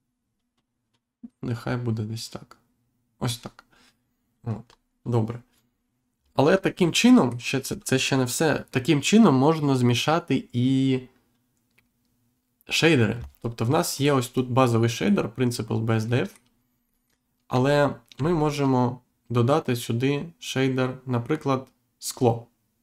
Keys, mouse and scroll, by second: 4.6-5.0 scroll down 1, 6.1-6.5 scroll down 1, 7.0 middle click, 13.9 click, 16.0 middle click, 16.8 middle click, 18.1 shift+a.